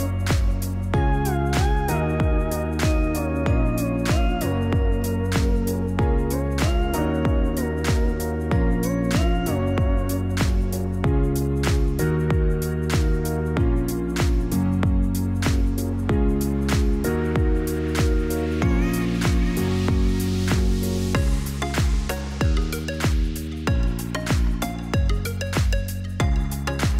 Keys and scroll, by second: 7.3 r, 8.5 ctrl+z, 14.8-15.8 typing, 22.2-23.3 typing, 24.4 typing, 25.3 ctrl+c, 25.6 ctrl+v.